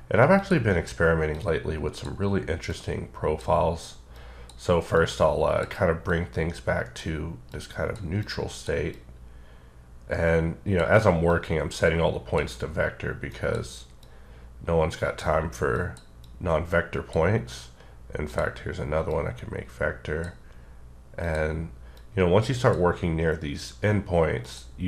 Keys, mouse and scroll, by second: 0.3 click, 1.3 click, 2.7 click, 4.4 click, 6.0 click, 7.5 click, 8.2 click, 8.9 click, 11.3 click, 13.3 click, 14.0 click, 15.7 click, 16.2 click, 18.2 click, 19.1 click, 21.2 click, 21.9 click, 24.4 click.